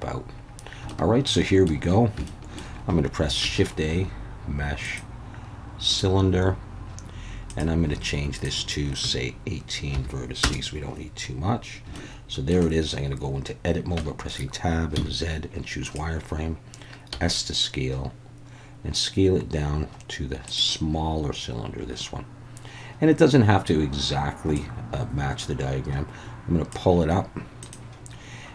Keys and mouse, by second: 0.9-1.7 shift+middle drag, 2.3 shift+middle click, 3.4 shift+a, 7.5 click, 8.3-10.7 drag, 12.0-12.5 shift+middle drag, 14.0 Tab, 15.0 z, 17.1 s, 20.5 click, 24.5-26.7 drag, 27.6 click.